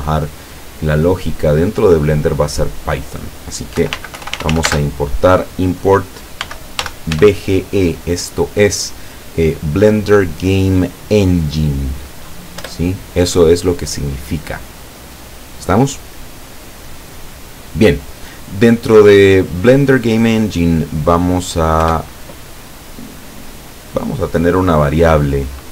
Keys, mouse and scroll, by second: 3.8-4.7 typing, 6.5 b, 6.8 g, 7.2 e, 12.6 Return, 21.9 Return.